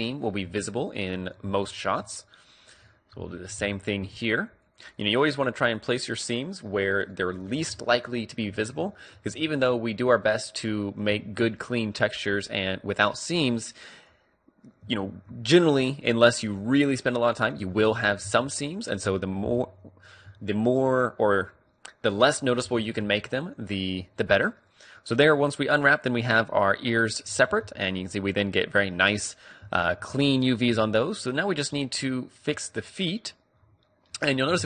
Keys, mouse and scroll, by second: 2.6-4.8 middle drag, 4.8 click, 5.6-7.9 right drag, 7.9-11.3 middle drag, 13.7-15.4 drag, 15.1 ctrl+e, 17.2-20.3 middle drag, 17.7 a, 18.3 Tab, 19.2 Tab, 20.4 a, 20.9-22.2 middle drag, 22.2 click, 22.7 u, 27.3 Tab, 27.5-28.8 middle drag, 28.9 middle click, 29.8 middle click, 30.8 Tab, 32.3 middle click, 32.4-34.2 middle drag.